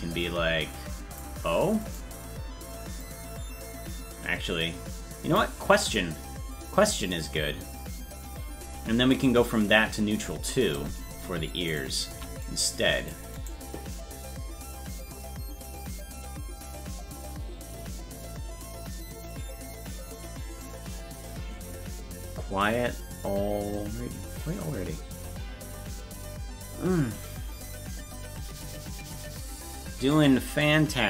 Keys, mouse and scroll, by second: 0.2 click, 0.5 click, 2.0 right click, 3.0-5.3 drag, 11.7 right click, 12.1 c.